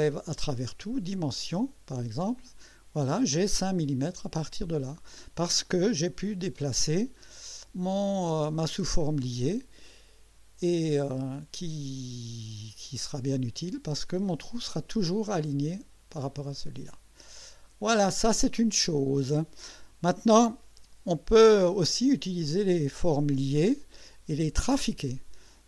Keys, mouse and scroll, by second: 0.1 click, 1.1 click, 2.5 click, 3.2-3.8 drag, 5.0 scroll down 1, 5.6-6.3 drag, 6.7-7.4 drag, 9.2-14.2 drag, 14.4-15.1 drag, 15.3 click, 16.9-18.6 drag, 21.7 scroll up 1, 22.4 right click.